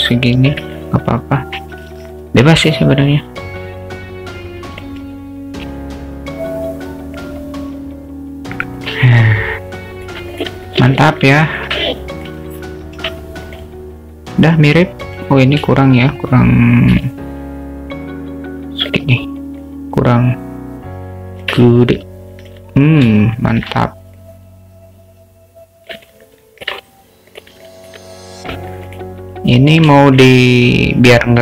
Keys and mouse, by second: 0.8-1.6 alt+middle drag, 2.6-4.9 alt+middle drag, 7.9 s, 9.1-10.2 alt+middle drag, 10.4 click, 10.7-11.0 alt+shift+middle drag, 11.3-11.7 alt+shift+middle drag, 11.8-12.3 alt+middle drag, 15.0 click, 15.6 shift+click, 16.9 s, 19.6-21.5 drag, 21.7-22.6 alt+middle drag, 23.2-23.6 alt+shift+middle drag, 24.1-26.0 drag, 26.2-26.7 alt+middle drag, 27.6 alt+middle click, 28.8 click, 30.1 shift+middle click.